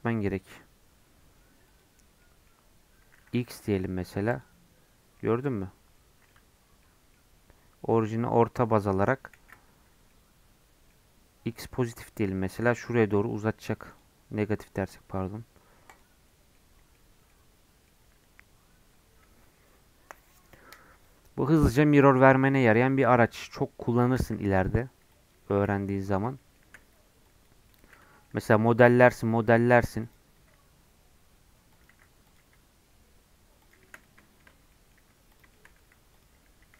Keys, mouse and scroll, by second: 1.6 click, 2.2-3.4 middle drag, 3.4-5.1 drag, 5.1-6.3 middle drag, 6.3 Tab, 6.8-9.4 middle drag, 9.4 ctrl+z, 10.1-13.1 middle drag, 13.9-16.5 drag, 16.5-18.1 middle drag, 18.1 Tab, 22.5 Tab, 24.4 x, 25.1 click, 25.5 x, 25.8-26.2 scroll up 10, 26.4 shift+middle click, 26.6 shift+a, 27.7 middle click, 28.0 Tab, 28.2 middle click, 29.0 3, 29.2 click, 29.5 e, 30.4 s, 31.9 e, 32.4 s, 33.8-34.2 shift+scroll down 3, 34.2 shift+middle click, 34.5 scroll down 1, 34.7 middle click, 35.0 e, 35.5 shift+middle click, 35.8 e, 36.6 s.